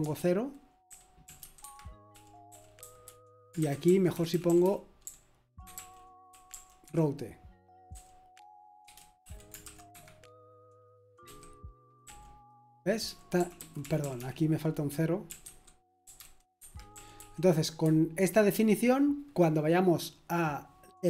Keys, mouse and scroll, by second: 0.0-12.0 typing, 13.0-14.1 typing, 15.3-18.5 typing, 20.4-21.0 typing.